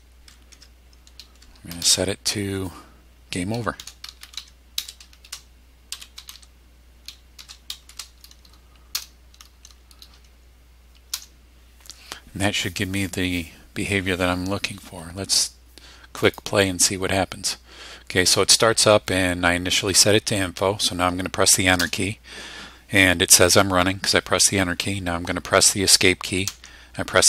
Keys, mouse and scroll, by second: 0.5 Tab, 1.7 shift+', 3.5-7.9 typing, 8.9 Return, 11.1 Return, 16.2 click, 21.9 Return, 26.5 Escape.